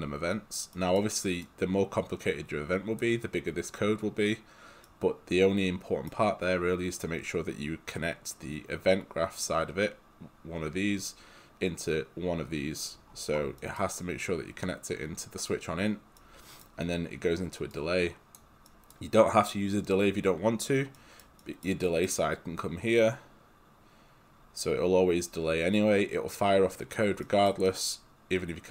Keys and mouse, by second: 1.4 click, 4.9 right click, 13.7 right click, 17.7 click, 18.7 right click, 27.5 right click.